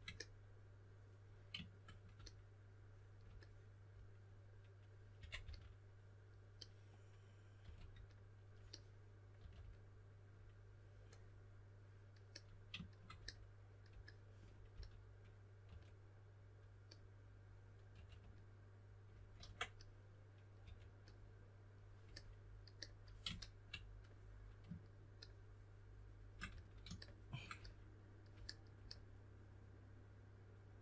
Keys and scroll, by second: 5.1 typing, 7.6 typing, 9.3 typing, 14.7-16.1 typing, 17.9 typing, 19.3 super+z, 20.6 2, 26.4 s.